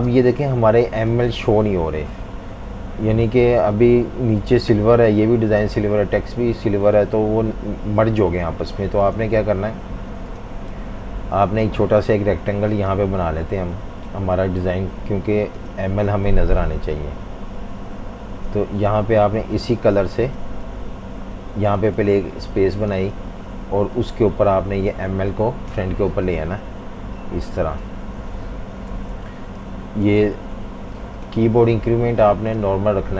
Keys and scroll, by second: 0.0 space, 9.7 F19, 15.7 typing, 19.7-20.8 typing, 22.0 z, 22.1 z, 23.2 v, 23.3 v, 25.7 shift+super+], 26.3 v, 28.4 Page_Down, 28.5 Page_Down, 28.9 Page_Up, 30.1 super+-, 30.3 super+-, 30.5 super+-.